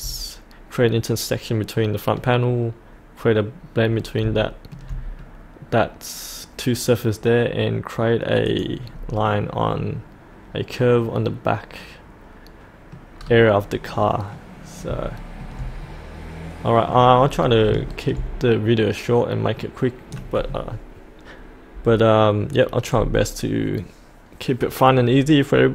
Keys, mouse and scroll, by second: 4.4 shift+middle click, 5.2-7.5 middle drag, 8.5 click, 8.9-9.2 scroll up 1, 9.2-13.1 middle drag, 13.1 scroll down 1, 13.9 middle click, 14.6 scroll up 1, 15.2 shift+middle click, 15.8 middle click, 17.1-17.6 scroll down 1, 17.9 shift+middle click, 18.5 scroll up 1, 18.8-25.7 middle drag.